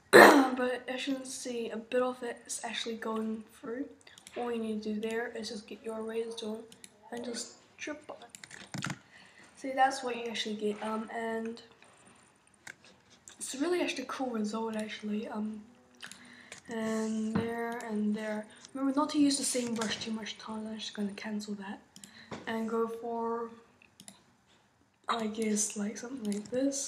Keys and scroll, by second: 19.7 super+z.